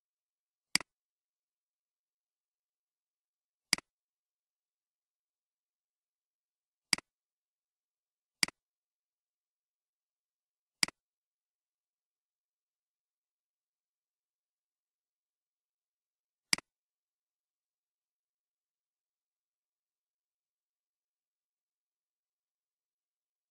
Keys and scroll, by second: 1.8 ctrl+c, 5.2 ctrl+v.